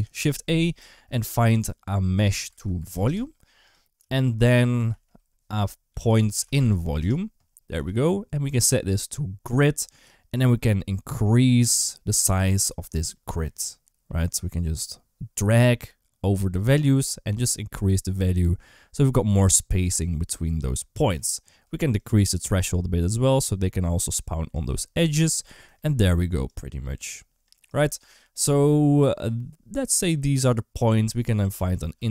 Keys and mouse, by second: 3.8 g, 4.7 shift+a, 8.6-9.4 drag, 12.9-19.6 shift+drag, 21.9-24.4 shift+drag, 26.3-27.5 drag, 31.4 shift+a.